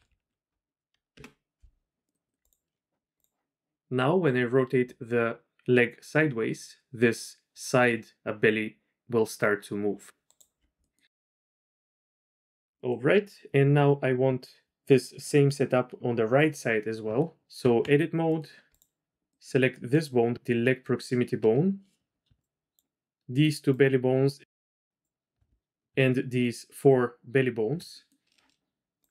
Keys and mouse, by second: 3.1 click, 4.2-6.3 drag, 9.7 click, 10.5 middle click, 10.8 click, 11.8 click, 12.0-12.6 drag, 12.7 click, 17.6 Tab, 19.4 click, 22.1-25.0 shift+drag, 25.3 click, 25.7 ctrl+click, 28.0 right click, 29.0-29.1 right drag.